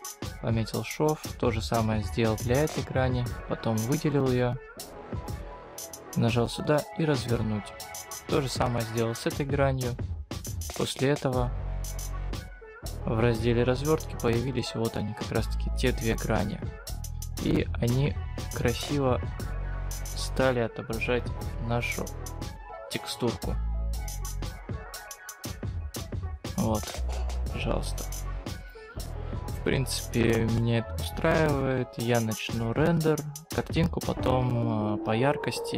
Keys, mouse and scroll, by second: 0.6 click, 0.9 scroll down 2, 1.2-2.5 scroll up 3, 2.5-3.7 scroll down 1, 3.7 click, 4.8 right click, 6.4 click.